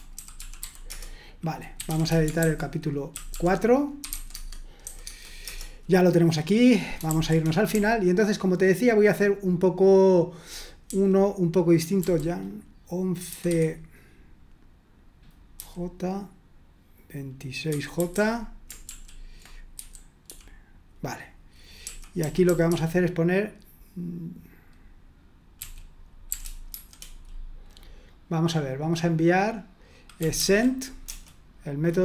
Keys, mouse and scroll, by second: 0.4-4.8 typing, 5.1 Return, 7.1-12.0 typing, 13.5 typing, 15.5 j, 17.5-20.3 typing, 21.8-22.7 typing, 25.6-26.7 typing, 30.0-31.1 typing.